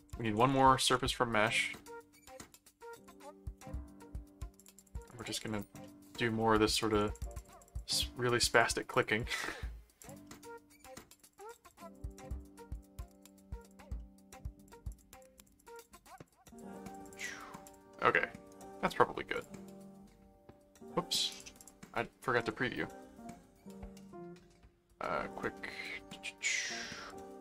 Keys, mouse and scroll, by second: 0.0-3.6 typing, 3.7 Return, 4.6-6.0 drag, 5.8-6.9 middle drag, 6.9 click, 8.4-9.9 drag, 10.0 click, 10.2 middle click, 11.1-14.1 drag, 13.9 middle click, 14.6-18.2 drag, 18.5 right click, 19.3 click, 21.3 click, 22.4 click, 24.0 right click, 27.1 click.